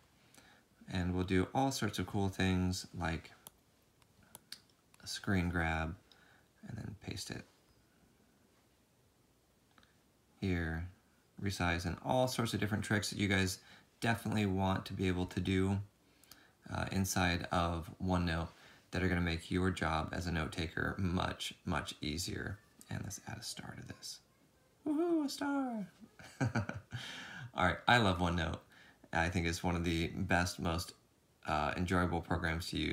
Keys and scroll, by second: 6.7 v, 8.4 v, 14.7 alt+Tab, 16.3 alt+Tab, 24.0 alt+Tab, 24.4 ctrl+2, 30.8 ctrl+z, 31.3 ctrl+z, 32.4 ctrl+z.